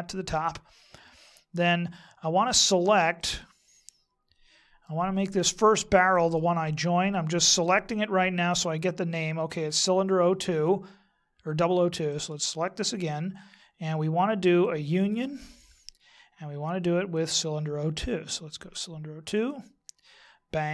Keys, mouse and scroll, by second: 3.2 middle click, 6.1 right click, 12.1 right click, 14.4 click, 17.1 click.